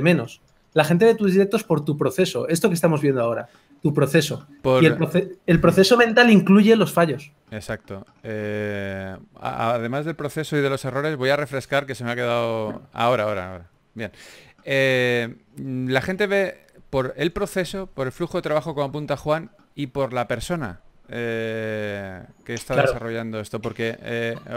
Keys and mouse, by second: 13.0 ctrl+s, 13.0 a, 16.0 a, 16.7 ctrl+s.